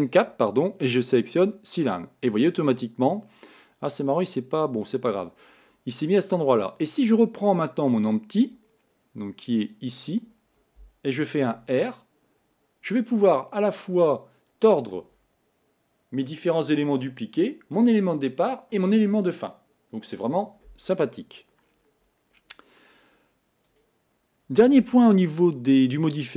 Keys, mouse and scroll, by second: 9.8 click, 11.9 r, 23.8 click.